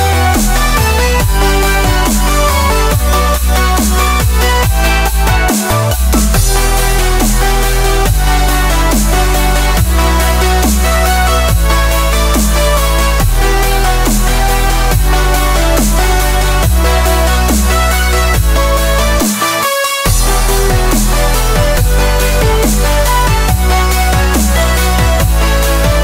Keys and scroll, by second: 7.5 shift+super+g, 7.7 shift+super+g, 20.2 Tab.